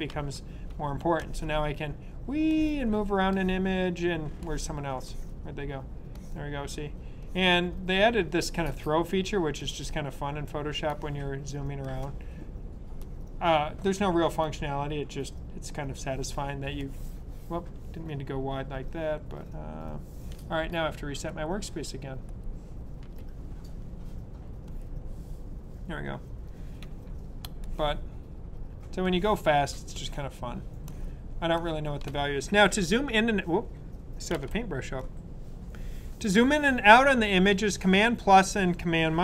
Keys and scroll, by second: 0.0 super+=, 34.2 super+z.